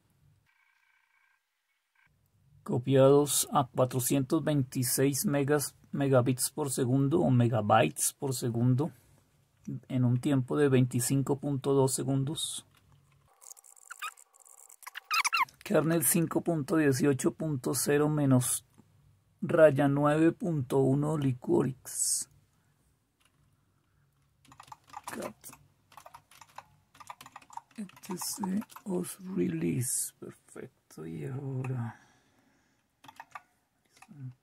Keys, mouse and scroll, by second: 28.6-29.4 typing.